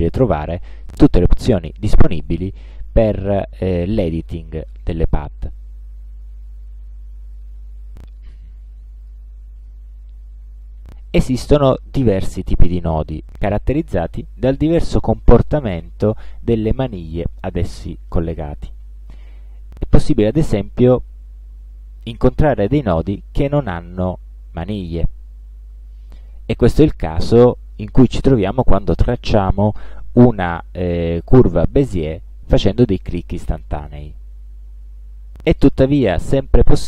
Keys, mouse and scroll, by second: 0.5-1.3 scroll down 2, 1.6-2.2 scroll up 2, 2.3-2.8 scroll up 2, 3.0-3.3 scroll up 2, 4.6-6.8 drag, 7.2 click, 9.1 click, 23.5 click.